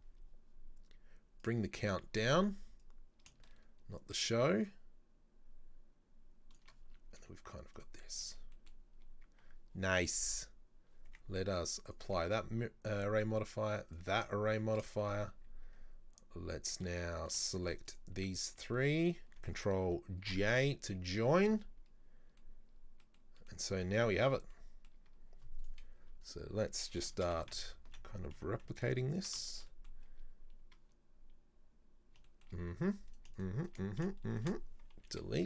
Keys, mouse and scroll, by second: 1.5 click, 2.9-5.9 drag, 6.9-7.3 scroll down 2, 7.3 z, 8.1 middle click, 8.3 Tab, 8.6 middle click, 9.1-10.2 scroll up 2, 11.1 Tab, 11.9 click, 13.0 right click, 13.9 click, 14.3 scroll down 1, 14.6 Tab, 14.9 shift+middle click, 15.5 scroll up 4, 15.7 Tab, 17.2 right click, 17.7 shift+right click, 17.9 shift+right click, 18.8-20.3 middle drag, 20.3 ctrl+j, 20.7-21.1 scroll down 2, 21.1-21.5 middle drag, 21.5-22.5 scroll down 1, 22.5-23.6 middle drag, 23.6 scroll down 1, 23.7-24.3 scroll up 5, 24.3 scroll down 1, 24.6-25.2 middle drag, 25.2-25.6 scroll down 1, 25.6 right click, 26.0 Delete, 26.3 right click, 27.2 shift+d, 29.5 shift+middle click, 30.1-32.3 scroll up 4, 32.3-32.8 shift+middle drag, 32.8-33.2 scroll down 2, 33.2 right click, 33.4 shift+right drag, 33.7 shift+right drag, 33.9 scroll down 1, 34.4 shift+right click, 35.2 Delete.